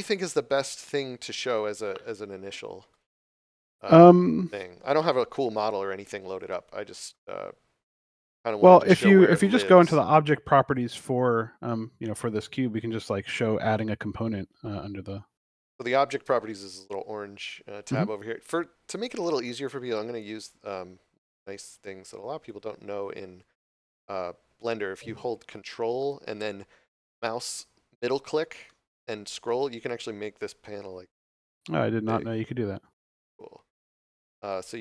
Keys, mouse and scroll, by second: 4.5 scroll up 1, 7.5 scroll up 1, 10.4 click.